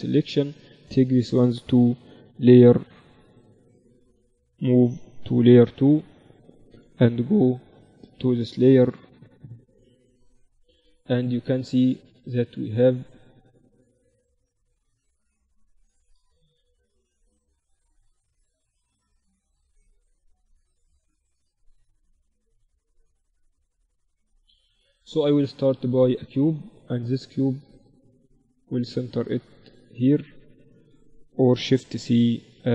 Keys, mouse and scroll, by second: 0.6-2.4 right drag, 5.1 m, 7.8-9.6 drag, 8.9 KP_1, 10.2 z, 12.5 Tab, 19.1 Tab, 20.6-22.0 drag, 24.6 shift+a, 27.7-29.6 drag, 30.8 x, 31.7 shift+c, 31.9 shift+a.